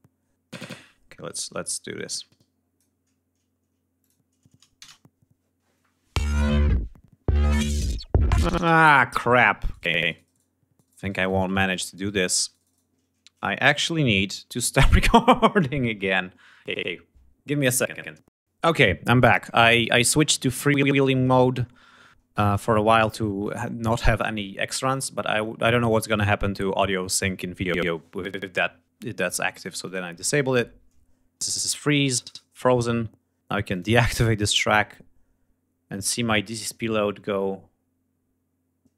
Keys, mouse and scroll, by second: 1.6 click, 3.6 click, 4.3 shift+space, 8.2 space, 9.3 shift+right click, 11.8 shift+right click, 13.1 shift+click, 13.5 shift+right click, 29.8 F1, 30.9 click, 31.7 right click, 33.3 click.